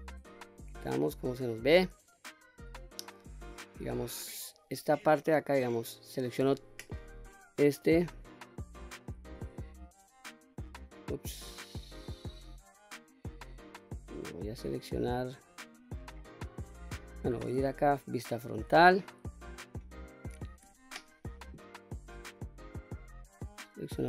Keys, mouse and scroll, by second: 0.3 Tab, 0.9-3.1 middle drag, 3.3-3.8 scroll up 2, 5.0 Tab, 5.7 click, 6.4 3, 7.0 click, 7.5 middle click, 8.6 middle click, 9.8 l, 10.8 click, 11.4 click, 12.2 l, 13.7-14.1 scroll down 1, 14.1-15.9 middle drag, 15.9 scroll up 1, 16.2-16.8 scroll down 2, 16.7-17.9 middle drag, 17.9 KP_1, 18.4-19.1 scroll up 3, 19.7-20.1 shift+middle drag, 20.6 q, 22.2 click, 23.0-24.0 drag.